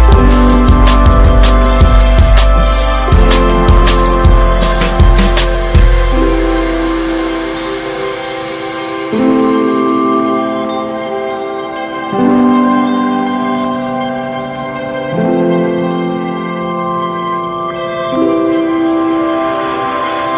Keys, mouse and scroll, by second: 1.2 ctrl+z, 1.6 s, 3.0 click, 3.6 alt+shift+click, 4.0 s, 5.5 Tab, 5.6 click, 5.9-6.3 scroll down 2, 6.3 middle drag, 6.6-7.2 scroll up 3, 6.7 Tab, 7.3 shift+middle click, 7.9 x, 10.9 3, 11.4 alt+middle click, 12.1 Tab, 12.5 middle click, 12.9 Tab, 14.1 3, 14.1 click, 14.7 shift+click, 15.4 alt+shift+click, 16.1 shift+middle click, 16.9 shift+d, 17.7 middle click, 18.5 e, 18.8 alt+s, 20.2 middle click.